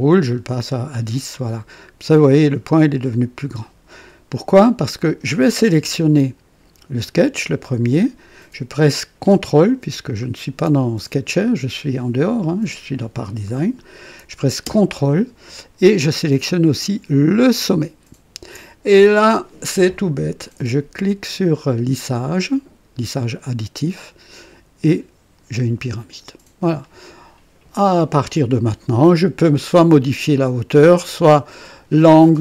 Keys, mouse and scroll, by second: 1.3 click, 5.4 click, 17.4 ctrl+click, 23.2 click, 24.8 click, 25.8-28.9 drag, 30.9-32.0 drag.